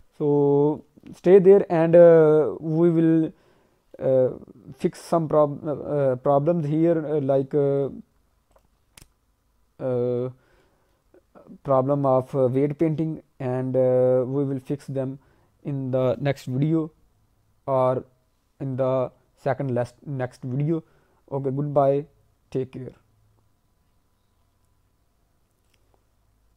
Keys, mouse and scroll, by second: 0.7 scroll up 1, 0.9 middle click, 1.3 scroll down 1, 1.5 alt+middle click, 2.6 scroll up 1, 3.9 alt+middle click, 7.7 click, 8.5 click, 10.5 alt+middle click.